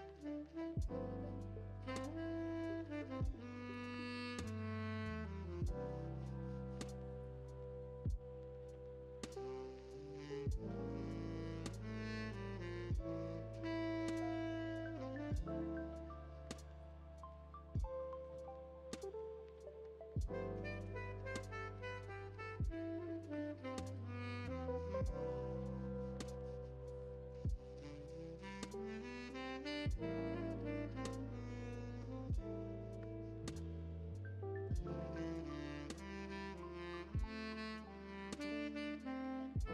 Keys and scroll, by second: 0.3 s, 9.4-10.0 typing, 17.5 p.